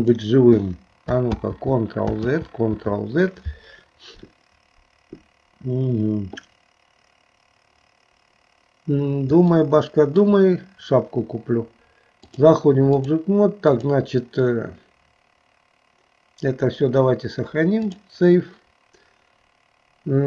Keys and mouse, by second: 1.4 ctrl+z, 2.4 ctrl+z, 9.6 shift+middle click, 12.4 click, 13.9-18.1 drag.